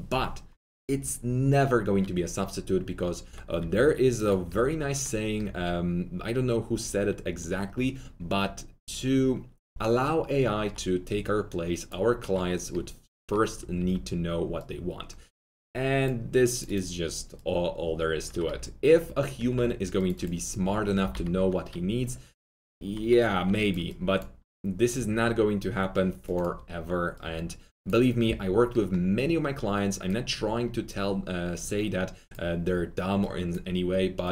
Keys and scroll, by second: 3.5 2, 13.7 r, 20.7-21.6 typing, 23.4 1.